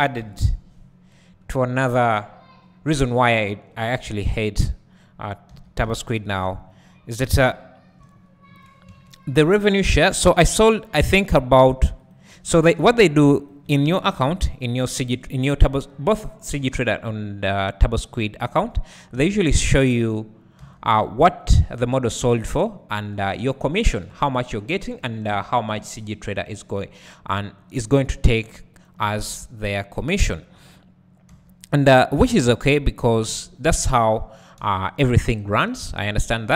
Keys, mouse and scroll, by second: 0.2 KP_1, 1.1-1.5 scroll down 2, 1.5 Tab, 5.5 2, 5.8 `, 6.6-7.2 scroll up 2, 7.2 scroll up 1, 7.5 `, 8.6 click, 9.8 3, 10.9 click, 12.1 x, 12.8 1, 13.5 alt+click, 14.2 KP_1, 15.0 KP_Decimal, 16.5 e, 20.2-20.6 scroll up 2, 20.6 3, 22.1 click, 25.0 x, 25.3 2, 27.8 click, 28.8 shift+click, 29.5-30.0 scroll down 1, 30.0 `, 31.3 3, 32.3 click, 32.9-33.2 scroll down 1, 33.2 `, 35.2 right click, 35.6-36.5 drag.